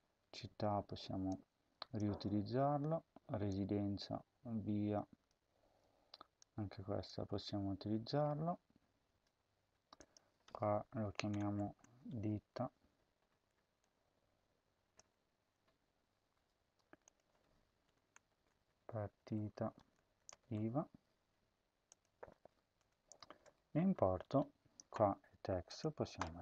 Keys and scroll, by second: 2.0 ctrl+v, 5.6 ctrl+c, 7.0 ctrl+v, 11.0 Left, 11.2-12.9 typing, 14.8 BackSpace, 15.4 BackSpace, 17.8-21.1 typing, 22.8-24.7 typing.